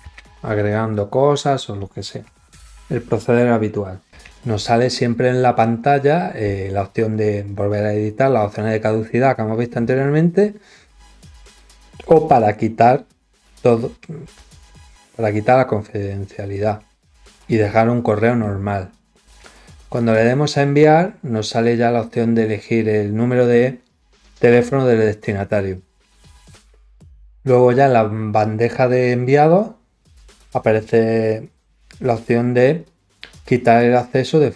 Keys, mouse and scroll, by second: 19.9 click.